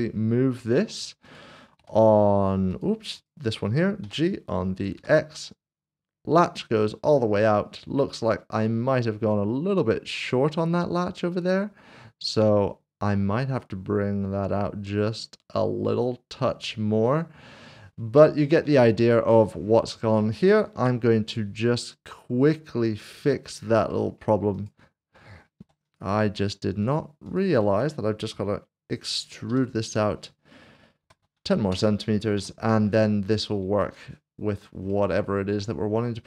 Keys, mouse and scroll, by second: 0.8 w, 1.3 click, 1.8 g, 3.1 right click, 3.1 click, 4.9 g, 17.1 right click, 18.4 shift+middle click, 20.2 middle click, 20.8 Tab, 21.3 middle click, 23.3 shift+middle click, 23.9 middle click, 24.5 click, 25.6 3, 26.3 shift+click, 31.0 typing, 31.7 Return, 32.4 Tab, 33.0 middle click, 33.8 click, 33.9 double click, 34.5 scroll down 1, 35.1 middle click.